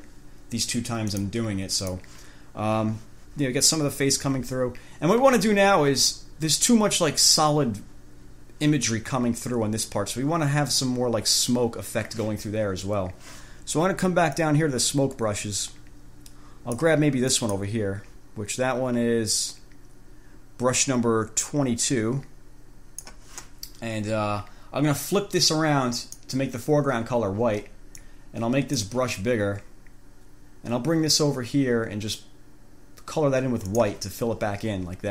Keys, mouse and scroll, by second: 1.4 click, 2.1 click, 14.6-17.2 drag, 17.5 click, 19.5-23.4 drag, 26.1 click, 28.1 click, 33.9 click.